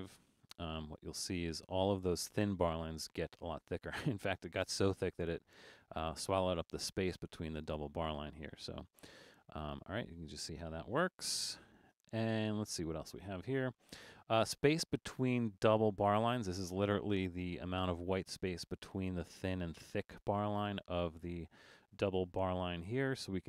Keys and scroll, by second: 11.2 super+z, 12.1 alt+super+a.